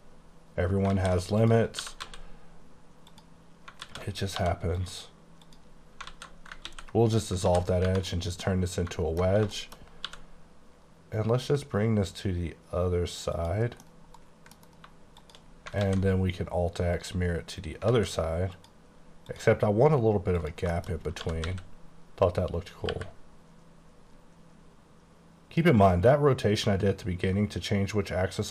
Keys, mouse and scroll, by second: 0.2-0.9 scroll up 5, 1.0 alt+z, 1.4 click, 1.8 typing, 3.1 click, 3.9 alt+z, 4.4 2, 4.7 click, 5.4 click, 6.1 alt+z, 6.6 x, 7.5 alt+z, 7.9 Tab, 8.2 middle click, 9.4 scroll down 2, 9.6 shift+middle click, 10.1 g, 13.4 click, 13.9 middle click, 14.5 scroll down 1, 15.3 shift+click, 15.6 scroll down 3, 15.9 alt+x, 17.0 click, 18.0 alt+a, 18.6 click, 19.4 click, 19.9-20.4 scroll up 1, 20.4 click, 20.8 shift+middle click, 21.0 shift+scroll up 3, 21.3 typing, 22.9 y.